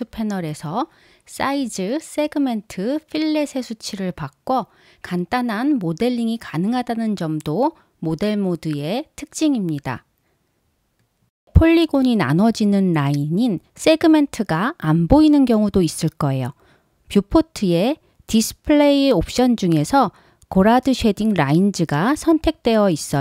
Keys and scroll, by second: 8.8 5, 9.0 Return, 10.8 1, 11.1 Return.